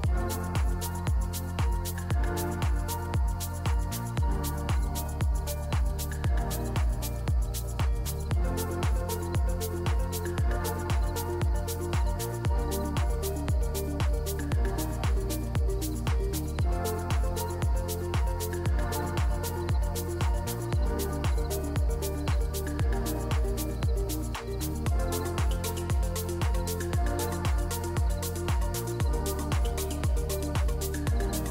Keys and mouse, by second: 2.4 Tab, 3.2-4.8 shift+drag, 5.6 KP_1, 7.0 middle drag, 7.3 shift+middle click, 7.8 middle drag, 9.6 click, 10.0 click, 10.4 click, 11.0-11.5 drag, 11.7 click, 12.2 click, 12.7-13.1 middle drag, 14.3-16.5 shift+drag, 16.9-17.6 middle drag, 18.0 middle click, 18.4 KP_1, 19.2 Tab, 22.1 k, 26.6 2, 28.4 g, 30.6 z, 31.3 Tab.